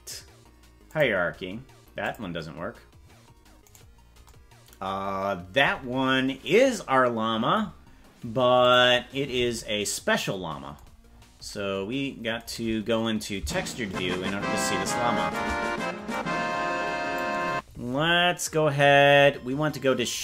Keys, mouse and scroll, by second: 2.0 click, 3.7 right click, 8.8 click, 11.1-11.5 scroll down 6, 13.5-15.5 shift+drag, 16.1-17.2 drag.